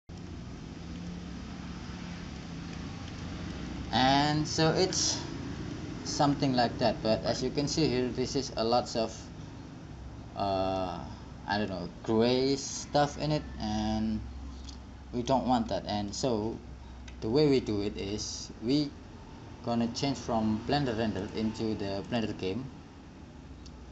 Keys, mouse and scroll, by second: 6.6-11.0 middle drag, 13.5 middle click, 15.3 middle click, 17.3 middle click, 21.4-23.9 drag.